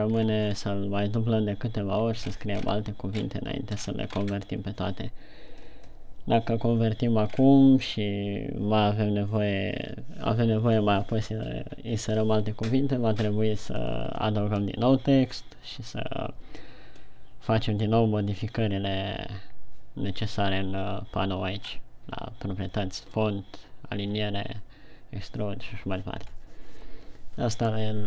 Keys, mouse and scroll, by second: 0.5 right click, 0.5-1.4 shift+scroll down 8, 2.6-3.6 shift+scroll up 8, 4.2-4.7 shift+scroll up 3, 7.8-9.3 scroll down 3, 22.1-23.6 scroll up 2, 26.8 scroll down 1.